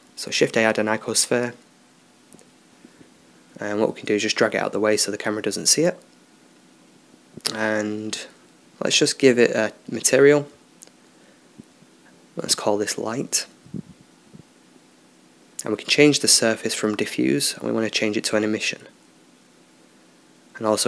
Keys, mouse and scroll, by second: 1.4-3.0 drag, 3.0-6.7 middle drag, 5.8-7.2 drag, 7.2-10.9 middle drag, 10.9-15.3 drag, 17.9-19.4 drag.